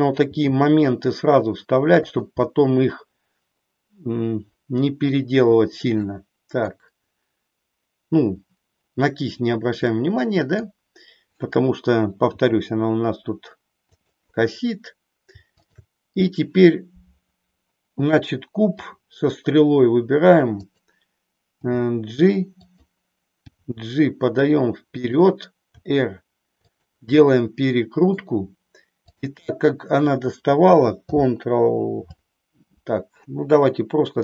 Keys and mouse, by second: 0.1 g, 2.1 click, 2.6-5.2 middle drag, 5.8 middle click, 9.8 middle click, 12.5 g, 13.9 click, 15.5-16.6 shift+drag, 18.8 r, 20.6 click, 21.5 g, 22.8 click, 23.5 g, 25.1 click, 25.7 r, 27.3 middle click, 29.1-30.1 drag.